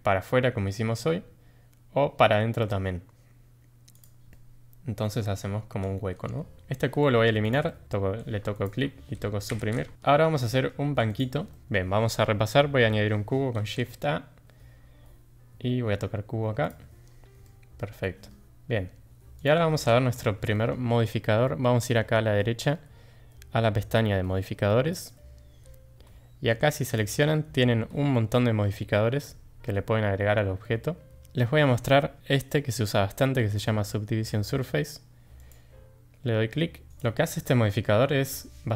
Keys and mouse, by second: 4.3-5.2 middle drag, 6.5 Tab, 7.7 middle drag, 9.5 Delete, 10.4 shift+middle drag, 11.5 middle click, 13.6 shift+a, 17.4-17.8 middle drag, 18.0 shift+middle drag, 18.5 g, 19.8 ctrl+z, 20.5 middle drag, 24.9 middle click, 26.8-35.5 drag, 36.9 Tab, 36.9 click.